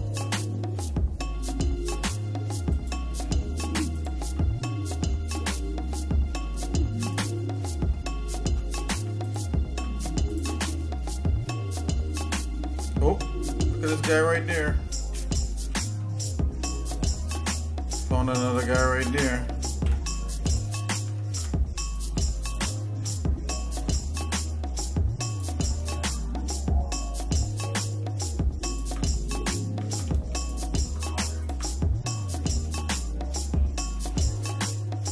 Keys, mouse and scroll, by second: 0.9 middle click, 2.7 alt+shift+click, 3.9 alt+shift+click, 4.6 scroll down 1, 5.0-6.3 shift+middle drag, 7.1 shift+click, 7.6 shift+middle click, 8.5 scroll up 1, 9.2 ctrl+click, 10.3 ctrl+click, 10.7 shift+middle click, 12.0-12.5 scroll up 2, 12.6 scroll down 2, 13.1-13.5 scroll up 2, 13.6 scroll down 1, 14.2 scroll down 1, 15.1 KP_Decimal, 16.0 middle click, 17.9 click, 18.4 shift+click, 19.7 alt+m, 21.2 ctrl+Tab, 22.4 alt+shift+click, 23.5 shift+middle click, 24.0 scroll down 1, 25.3 alt+shift+click, 25.9-27.8 shift+middle drag, 28.7 alt+shift+click, 29.9 ctrl+z, 30.4 alt+shift+click, 31.6 alt+shift+click, 31.9 scroll down 2, 32.4 shift+middle click, 32.9 middle click, 33.9 middle click, 35.0-35.1 scroll up 3.